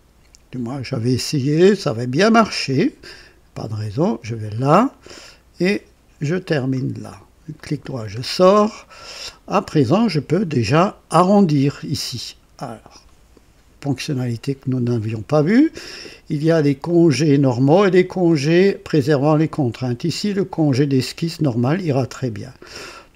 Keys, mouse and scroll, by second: 2.6 click, 4.5 click, 6.4 click, 7.5 right click, 8.1-8.4 scroll up 2, 8.7 right click, 16.8 click, 20.1 click, 21.4 click, 22.7-23.0 scroll up 1.